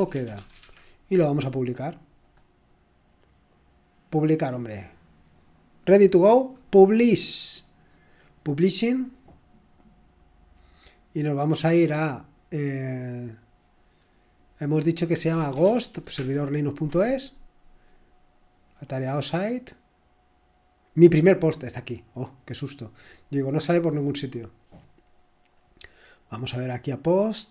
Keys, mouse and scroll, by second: 0.0-0.6 typing, 2.2 click, 3.3 typing, 4.3 click, 5.6-6.6 typing, 13.2 click, 15.0-16.2 typing, 18.7-19.5 scroll down 1, 21.3 click, 24.9 click, 26.4 click.